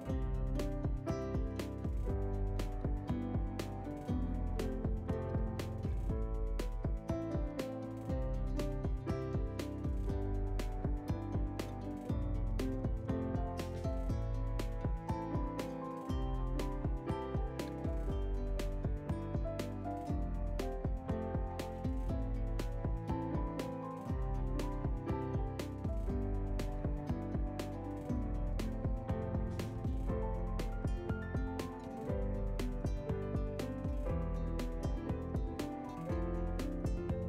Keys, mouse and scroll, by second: 21.3 ctrl+space, 21.3 scroll down 5, 30.2 shift+middle click, 30.5 middle click, 32.6 scroll up 1, 32.9 shift+middle click, 33.8 click, 34.4 scroll up 1, 34.6 shift+middle click, 37.0 scroll down 3.